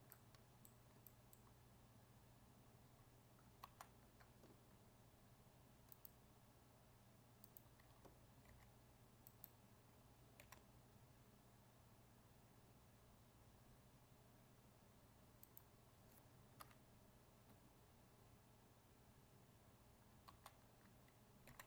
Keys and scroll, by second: 3.6 ctrl+z, 20.3 ctrl+z.